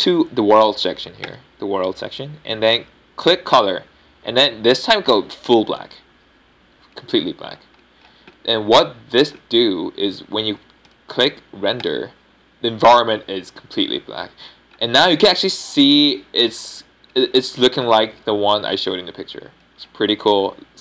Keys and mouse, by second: 3.2-7.8 drag, 7.8-8.9 middle drag, 12.8-13.9 drag, 14.6-16.5 middle drag.